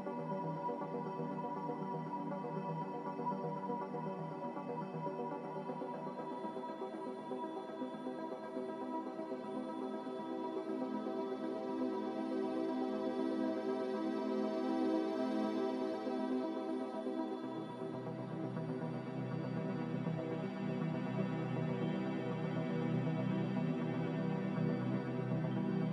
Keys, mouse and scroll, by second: 24.6 a.